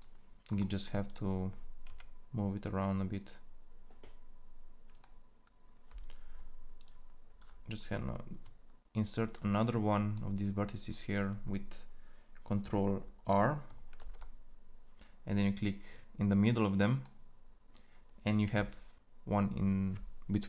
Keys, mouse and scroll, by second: 0.3-3.9 drag, 1.6 g, 9.2-13.8 drag, 13.8 ctrl+r, 18.2 g.